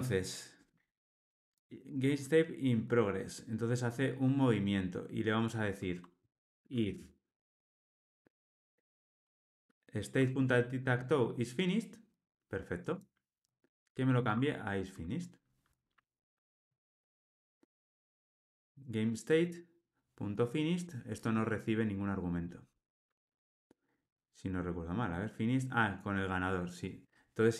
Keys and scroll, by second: 14.2 Tab.